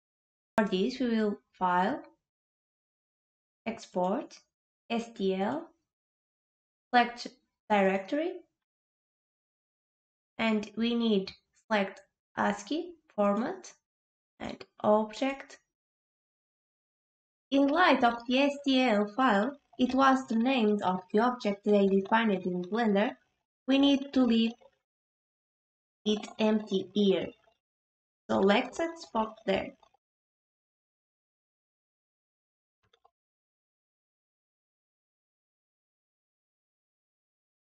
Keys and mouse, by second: 2.4-5.6 drag.